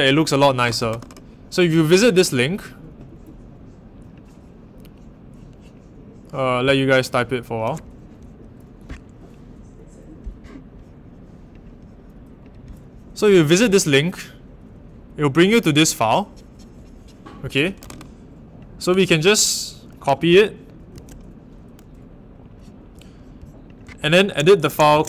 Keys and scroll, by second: 20.9 super+c, 24.9-25.0 typing.